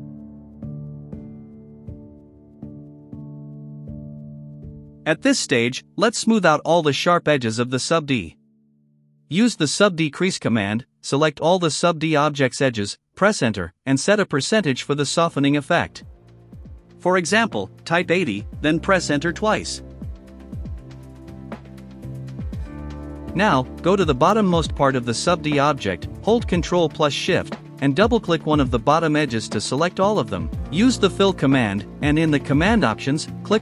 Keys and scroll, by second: 3.4 ctrl+alt+r, 5.7 ctrl+alt+s, 7.2-10.5 typing, 11.3 Return, 14.5 space, 16.3 KP_0, 17.3 BackSpace, 17.7 KP_8, 18.0 KP_0, 19.0 Return, 23.3 ctrl+alt+r, 25.2 ctrl+alt+s, 30.2-31.7 typing.